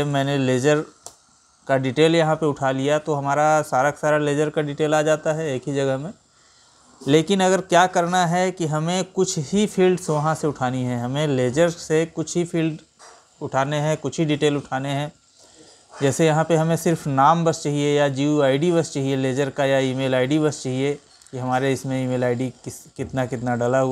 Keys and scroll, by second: 15.0 Right, 18.6 Right.